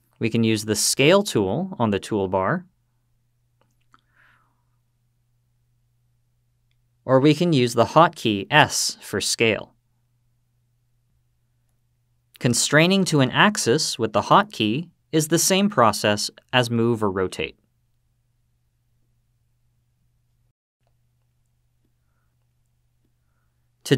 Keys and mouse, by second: 0.4 click, 2.3-2.8 drag, 3.6-4.2 drag, 9.0 s, 14.4 x, 17.3 y, 19.1 z, 21.7 click.